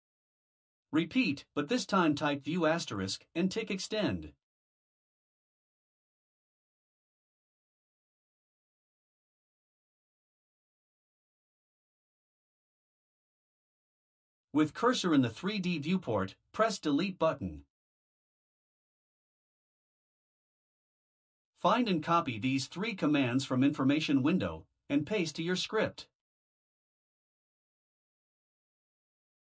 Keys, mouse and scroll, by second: 0.9 click, 15.8 Delete, 19.9 click, 22.5 click, 23.8 shift+click, 24.5-25.2 scroll down 2, 25.2 shift+click, 27.0 ctrl+c.